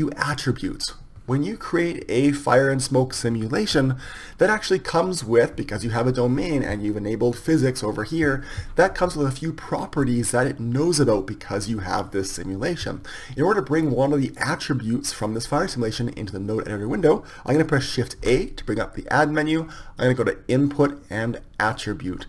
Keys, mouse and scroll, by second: 7.2-9.2 drag, 18.2 shift+a.